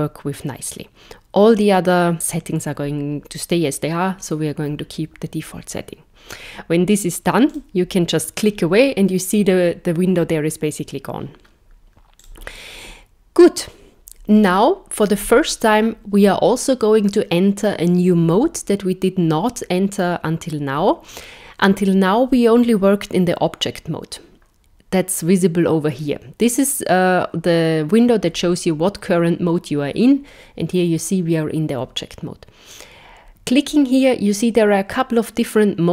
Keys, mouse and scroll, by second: 7.5 click, 12.2 click, 32.7 click.